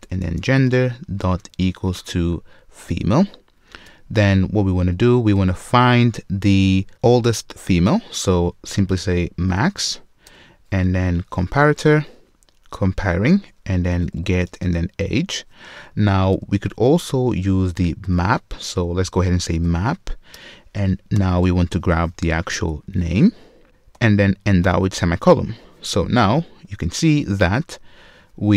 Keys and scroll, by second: 0.3 super+z, 1.8 Return, 1.9 ctrl+shift+space, 3.6 Return, 10.3 Return, 20.4 Return, 26.6 super+w.